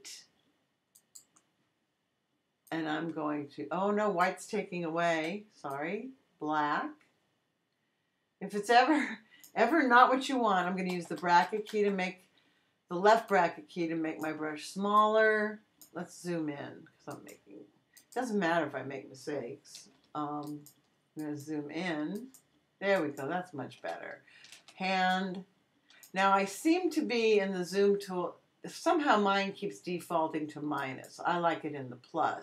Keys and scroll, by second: 5.1 x, 10.9 [, 20.5 super+space, 24.4 space.